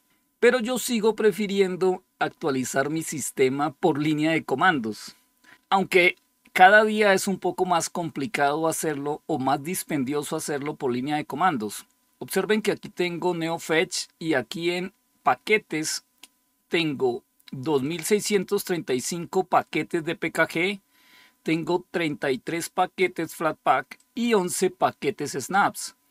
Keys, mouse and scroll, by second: 17.7-19.5 drag, 21.4-23.7 drag, 23.9-26.1 drag.